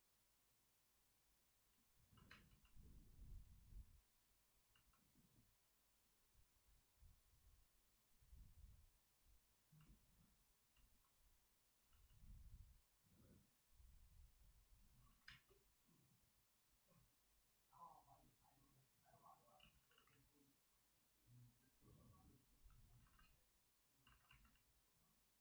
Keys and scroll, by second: 1.8 space, 2.2 space, 11.8 ctrl+z, 12.0 ctrl+z, 15.0 ctrl+z, 15.2 space, 19.5 ctrl+z, 19.7 ctrl+z, 19.9 ctrl+z, 22.9 alt+s, 24.0 alt+s.